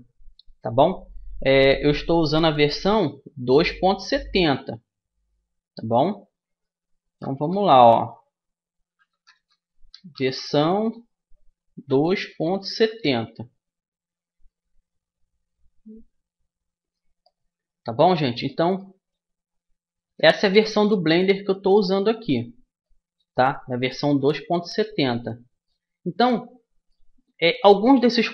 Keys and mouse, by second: 2.9 Tab, 2.9 middle click, 5.2 BackSpace, 8.8-12.6 typing, 15.7-17.5 drag, 20.0 g, 23.9-28.3 middle drag.